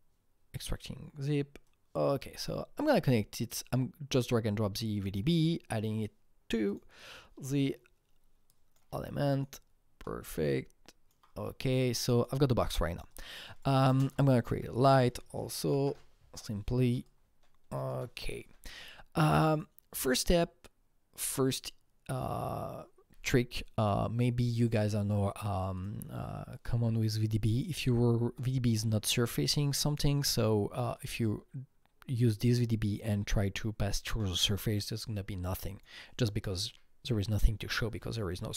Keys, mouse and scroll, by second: 1.6-4.1 drag, 4.1 click, 5.0 click, 6.7 click, 8.5 click, 9.0-12.0 alt+right drag, 10.0 alt+middle click, 10.5-13.1 alt+drag, 13.1 double click, 14.0 ctrl+space, 14.0 click, 14.5-16.3 typing, 15.6 Down, 17.0-24.6 shift+drag, 24.6-25.7 shift+drag, 26.8 click, 27.3-30.9 drag, 28.3-30.9 alt+middle drag, 30.9-33.6 drag, 35.5 click.